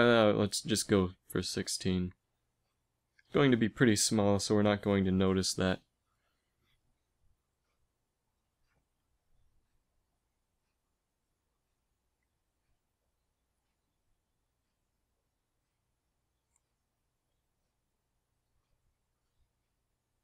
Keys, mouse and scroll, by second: 5.1 space, 6.8 s, 9.6 KP_1, 10.1 z, 12.7 s, 14.3 s, 17.7 g, 19.2 Tab, 20.0 z.